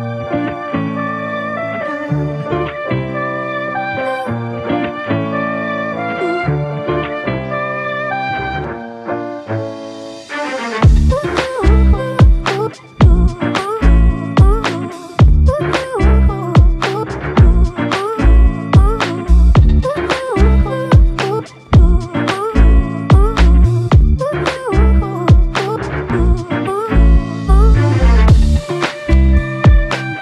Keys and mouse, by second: 1.5 space, 8.4 double click, 15.0 double click, 21.4 double click, 27.2 alt+click, 29.7 alt+click.